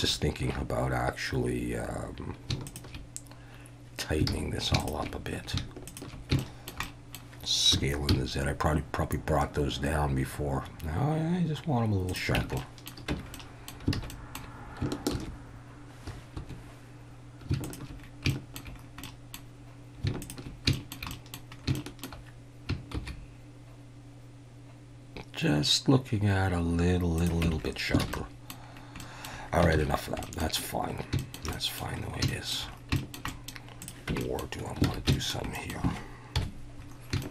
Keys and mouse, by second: 4.3 alt+a, 5.9 alt+shift+drag, 6.4 shift+middle drag, 6.8 middle click, 7.7 s, 8.1 z, 12.1 click, 12.4 Tab, 12.6-12.9 drag, 13.1 Tab, 13.3 click, 14.0 alt+a, 14.1 click, 15.1 ctrl+r, 17.6 alt+shift+click, 18.3 shift+middle drag, 19.0 middle click, 20.7 shift+middle click, 21.1 middle click, 21.8 shift+middle click, 22.9 shift+e, 27.2 click, 27.5 Tab, 28.0 alt+a, 28.1-28.5 middle drag, 29.0 middle drag, 29.7 ctrl+s, 30.2 drag, 31.2 shift+click, 31.5 click, 32.3 shift+middle drag, 33.0 shift+middle click, 33.3 middle click, 34.1 Tab, 34.2 middle click, 34.8 alt+a, 35.1 shift+middle click, 35.5 middle click, 36.4 KP_1, 37.2 shift+middle drag.